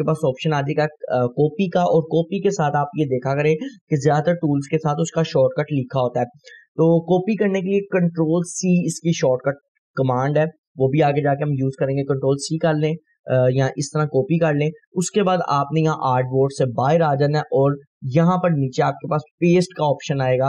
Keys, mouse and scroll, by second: 12.4 click, 16.9 right click.